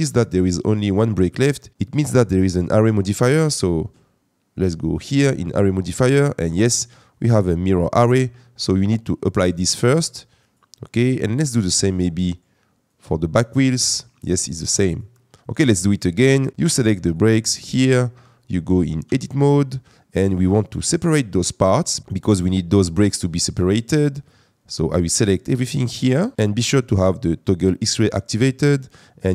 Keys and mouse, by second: 2.0 Tab, 4.5 click, 9.6-10.5 drag, 13.0 click, 14.4-15.0 drag, 19.0 Tab, 24.8 click.